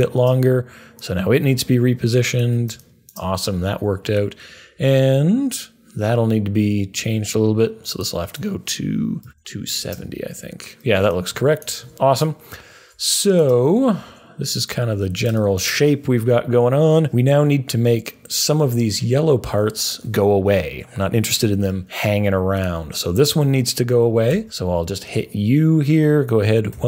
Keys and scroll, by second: 8.9-9.8 typing, 12.4-15.4 typing, 24.2 u, 26.7 Page_Down.